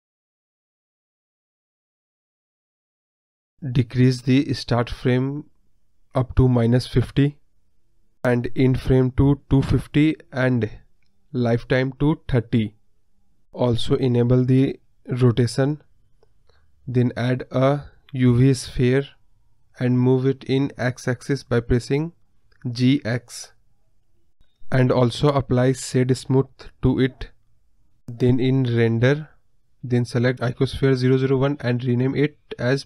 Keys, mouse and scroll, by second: 0.1-3.3 drag, 3.3-4.1 scroll up 2, 4.1-15.2 drag, 15.3-16.9 scroll down 2, 16.9-19.3 drag, 19.3 shift+a, 22.7-24.1 scroll up 1, 24.1-25.1 scroll up 3, 25.1-25.8 right drag, 25.8-26.6 scroll down 2, 26.6 KP_1, 27.5 g, 30.5-31.6 drag.